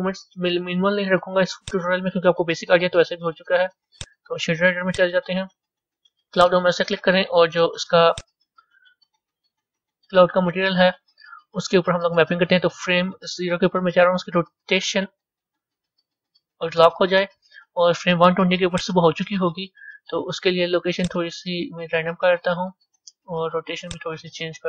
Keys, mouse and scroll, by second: 15.2 i, 16.3 i, 18.7-19.6 drag, 21.2-24.6 drag.